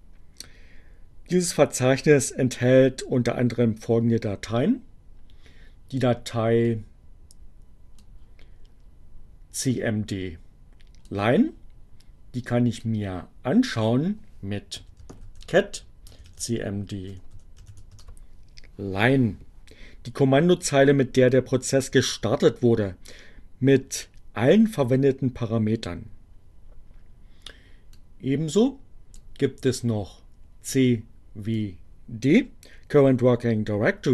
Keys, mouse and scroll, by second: 6.6-7.8 drag, 9.6-11.1 drag, 12.7-13.8 drag, 13.8-18.1 typing, 27.8-29.3 drag, 30.8 click.